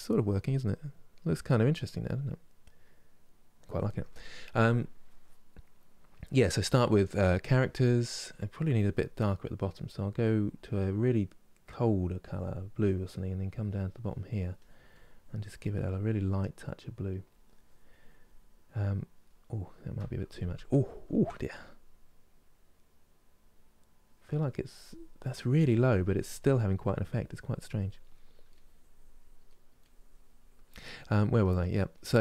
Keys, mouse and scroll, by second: 6.0-10.6 middle drag, 10.6-13.8 drag, 13.8 middle click, 14.3-19.0 drag, 19.0-20.1 middle drag, 20.1 ctrl+z, 20.6 ctrl+z, 22.1-27.8 drag, 27.8 middle click, 28.2 click, 29.2 middle click, 29.5-30.7 drag, 30.7 middle click, 31.1 click, 31.6 middle click.